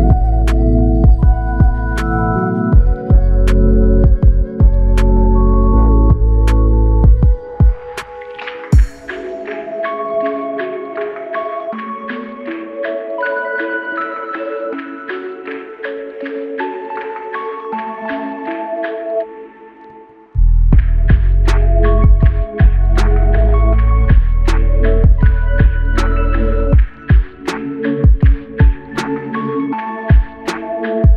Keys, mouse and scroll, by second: 3.2 ctrl+z, 3.7 ctrl+z.